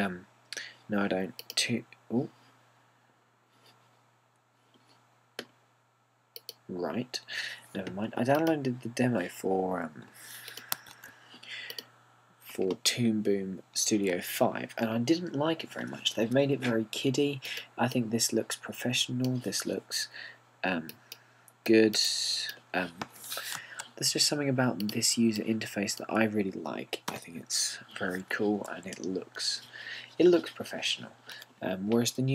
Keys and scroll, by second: 11.9 super+o, 28.2 BackSpace.